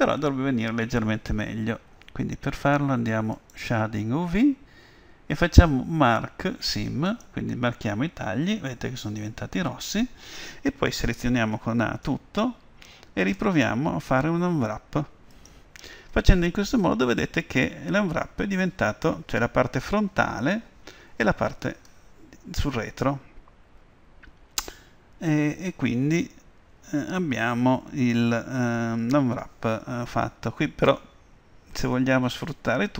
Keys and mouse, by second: 3.4-5.3 drag, 7.1-9.0 drag, 11.6 a, 12.1 a, 13.4 u.